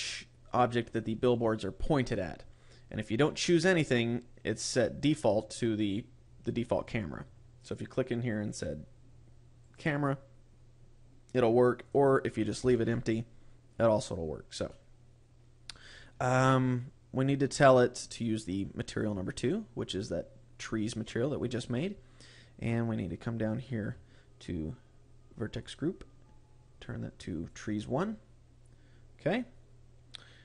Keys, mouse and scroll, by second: 7.5 click, 11.7 click, 14.6 middle click, 16.3 scroll up 4, 18.7 click, 22.6-24.0 scroll down 14, 25.5 click, 28.8-30.4 scroll up 11.